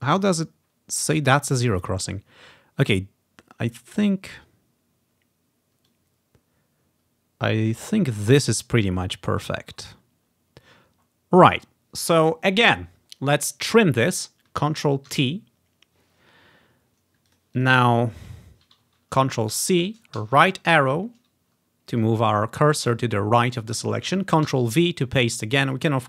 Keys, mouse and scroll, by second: 2.1-3.0 ctrl+scroll up 1, 3.0-3.8 ctrl+scroll up 1, 6.0-11.1 drag, 9.8-12.6 ctrl+scroll down 1, 15.2 ctrl+t, 17.4-19.7 drag, 19.7 ctrl+c, 20.3 Right, 24.6 ctrl+v.